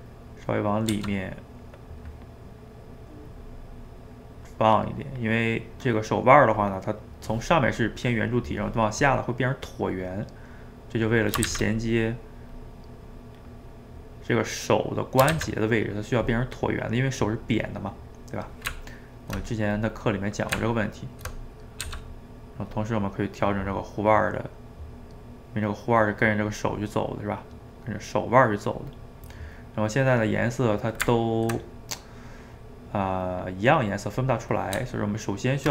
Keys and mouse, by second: 0.9 f, 1.4-2.4 drag, 2.4-3.7 middle drag, 3.7-5.5 drag, 5.5-6.6 middle drag, 6.6 click, 7.0-11.5 middle drag, 11.5 shift+z, 11.8 middle click, 12.6 click, 13.5 middle click, 14.3 click, 15.0 middle click, 15.3 shift+z, 15.6-18.7 middle drag, 18.7 Tab, 19.8 click, 20.5 Tab, 21.5 middle click, 21.8 f, 22.2 middle click, 22.7 click, 23.6-24.6 middle drag, 24.6 click, 25.5 middle click, 25.9 click, 26.5-27.6 middle drag, 27.6-28.9 drag, 28.9 middle click, 29.6-31.1 drag, 31.1-32.5 ctrl+middle drag, 32.5-33.6 drag, 33.6 middle click, 34.2 click, 34.5 middle click, 34.8 Tab.